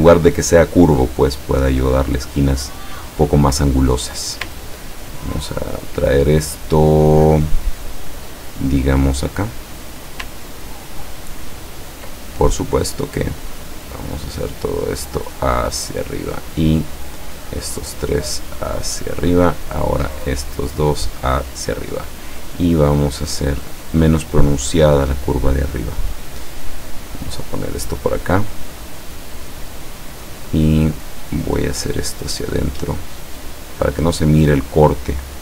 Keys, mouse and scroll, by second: 4.1 click, 4.6-5.2 ctrl+scroll down 1, 7.2-10.3 drag, 11.4-12.0 ctrl+scroll up 2, 12.3 ctrl+click, 13.4-14.4 drag, 15.0-16.5 drag, 17.5 click, 18.4-20.0 drag, 20.1 click, 20.9-21.9 drag, 22.5-24.2 drag, 24.8-26.2 drag, 26.8 click, 27.4 click, 28.7 click, 29.8 click, 31.9-35.0 drag.